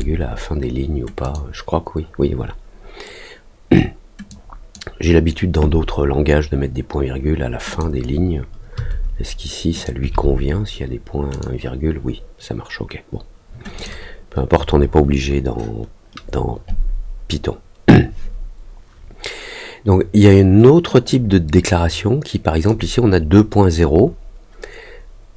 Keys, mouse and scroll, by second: 1.2 click, 4.2 click, 7.6 click, 9.7 click, 11.3 click, 13.7 click, 21.0-22.6 drag.